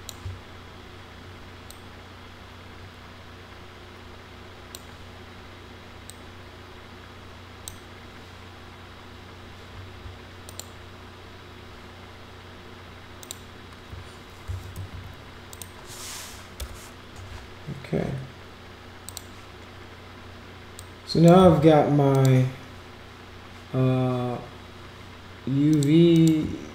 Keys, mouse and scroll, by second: 1.7-4.7 drag, 6.1-7.6 drag, 10.5 click, 13.2 click, 14.5 ctrl+c, 14.7 ctrl+v, 15.5 click, 19.0 click, 20.7 click, 22.1 click, 25.7 click, 26.1 click.